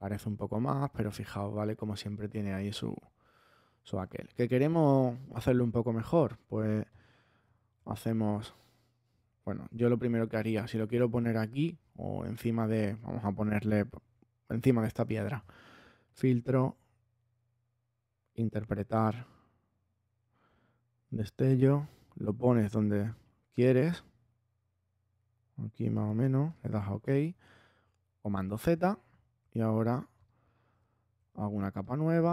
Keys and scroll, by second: 3.8 super+z, 10.0 space, 28.2 super+z.